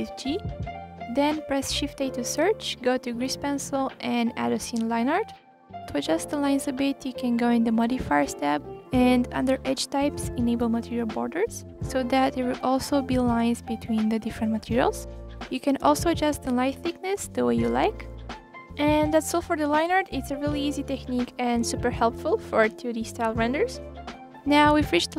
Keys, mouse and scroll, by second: 0.0 click, 0.2 g, 0.8-1.5 scroll up 2, 1.5 g, 5.7 click, 9.4-10.4 drag, 12.5-16.3 drag, 17.7-18.5 scroll down 1, 18.5-20.4 scroll up 1, 20.4 click, 20.8 click, 21.3 click, 21.6 click, 22.6 click, 23.0 click, 24.5-25.0 scroll down 1.